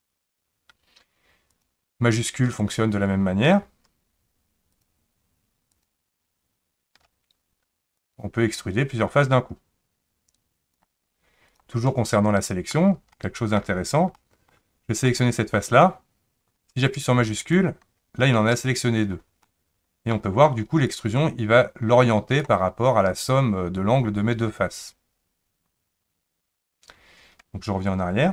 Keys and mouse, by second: 4.7 shift+click, 8.0-10.8 drag, 11.9 middle click, 13.1 shift+middle click, 14.1 middle click, 17.4 shift+click, 19.5 middle click, 20.9 click, 22.4 click.